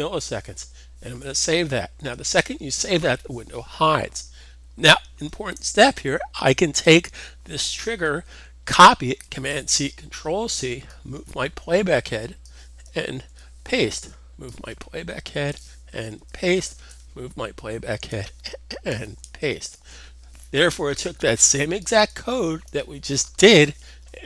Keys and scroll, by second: 1.9 super+s, 9.1 super+c, 13.1 super+v, 16.1 super+v, 19.6 super+v.